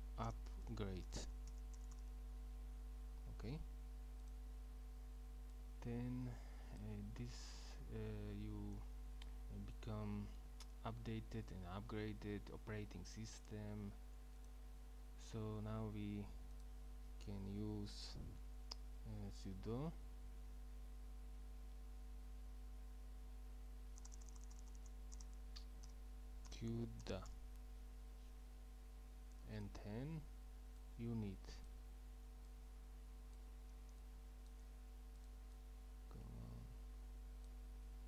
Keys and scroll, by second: 0.0-2.4 typing, 19.8 Up, 20.4 Up, 21.2-22.7 typing, 24.0-24.6 typing, 25.9-27.8 typing.